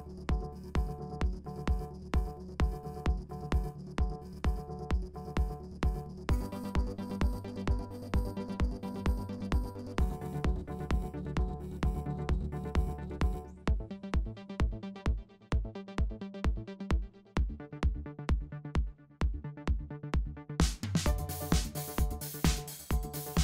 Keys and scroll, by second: 17.1 super+s, 19.9 super+c, 20.5 super+f, 21.3 shift+x.